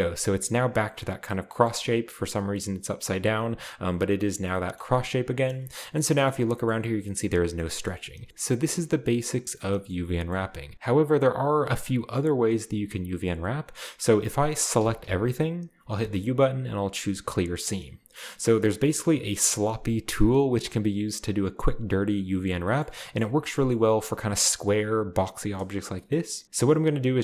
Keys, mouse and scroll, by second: 0.2 a, 0.4 a, 3.3-4.5 scroll down 1, 4.7-5.9 middle drag, 4.9-5.8 scroll down 1, 6.0 middle click, 6.2 middle click, 6.2-7.6 scroll up 2, 7.6 middle click, 7.6-8.3 scroll down 2, 8.3-9.0 shift+scroll up 2, 9.6-10.7 shift+middle drag, 10.3-10.7 scroll up 2, 13.8 middle click, 14.8-16.0 typing, 17.3-22.7 drag, 22.7-23.6 middle drag, 23.7-24.6 middle drag, 26.0 middle click, 26.4 right click, 26.4-27.2 typing, 26.6-27.2 drag.